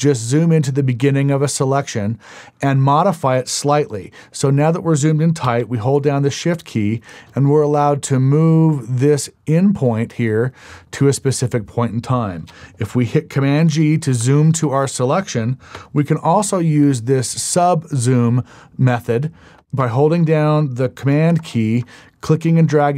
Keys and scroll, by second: 14.2 super+g.